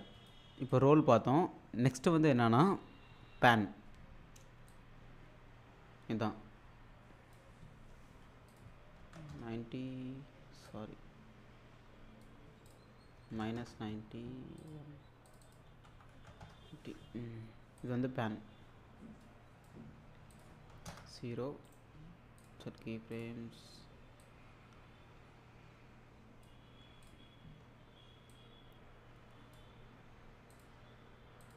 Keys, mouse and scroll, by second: 4.7-7.5 drag, 8.5 click, 10.7-12.2 drag, 14.6 click, 17.8-19.7 drag, 21.7 right click, 22.4-26.7 drag, 28.3-29.5 drag, 30.5 click.